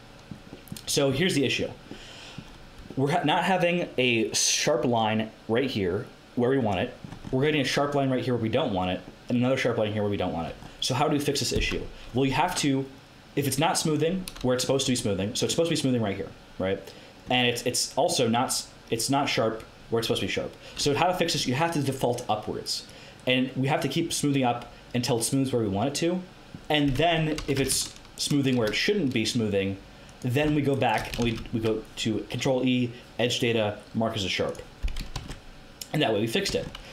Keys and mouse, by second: 19.4-20.7 middle drag, 22.8-26.1 drag, 27.0 Tab, 27.3 a, 28.1 click, 31.2 ctrl+e, 35.1 Tab, 36.4 Tab, 36.8 a.